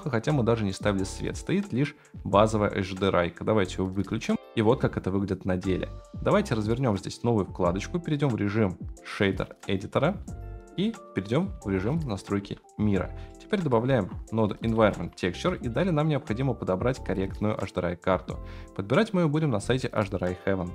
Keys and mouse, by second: 1.7-4.0 drag, 7.0-8.0 right drag, 8.4-10.3 right drag, 10.8-11.5 right drag, 12.4 n, 13.3 middle click, 13.7 right click, 13.9 shift+a, 16.6-17.2 right drag.